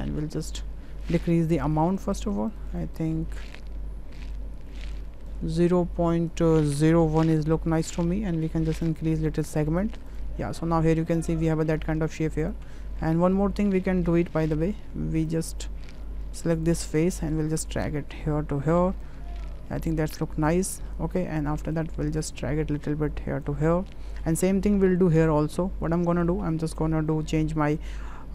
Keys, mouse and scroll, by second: 1.1 click, 1.2 click, 1.6 click, 2.1 click, 2.5 click, 2.9 click, 4.2-8.0 drag, 8.8 click, 9.3 click, 9.7 click, 12.4 click, 12.7 Tab, 15.2 click, 16.3 3, 16.6 click, 17.1-19.0 drag, 19.7 Tab, 20.5 middle drag, 21.7-23.5 drag, 26.1 ctrl+click, 26.7 shift+click, 27.9-28.3 drag.